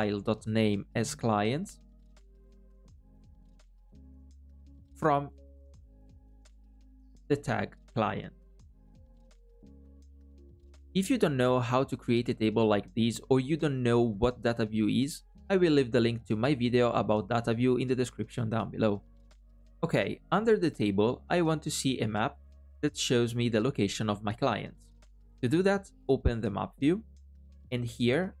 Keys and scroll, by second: 6.6 alt+ò, 7.3 alt+à.